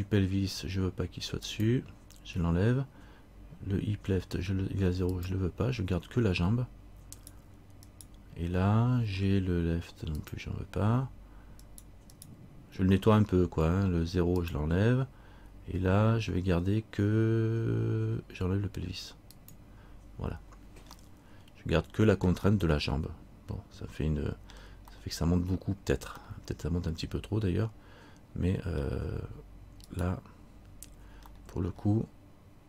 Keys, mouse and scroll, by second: 1.7 click, 5.3 click, 7.3 right click, 10.4 click, 11.8 right click, 14.6 click, 19.5 click, 21.2 middle click, 22.7 middle click, 23.9 middle click, 25.1 middle click, 26.4 middle click, 30.0 right click, 31.5 middle click.